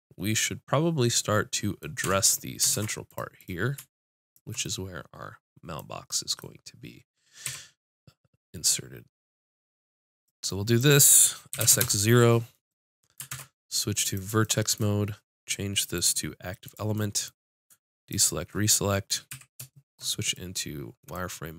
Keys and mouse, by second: 2.0 Tab, 2.7 ctrl+Tab, 3.4 click, 7.4 e, 10.2-12.2 drag, 11.5 s, 13.3 ctrl+Tab, 15.9 click, 16.7-19.3 drag, 19.3 z.